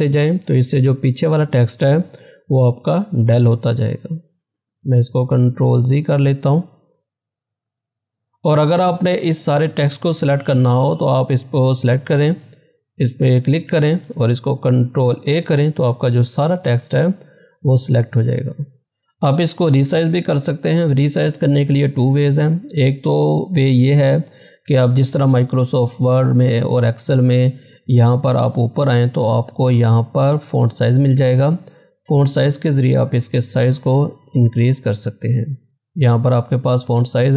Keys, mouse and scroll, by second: 2.3 BackSpace, 4.9 ctrl+z, 10.8 click, 13.8 click, 15.1 ctrl+a, 31.9 click.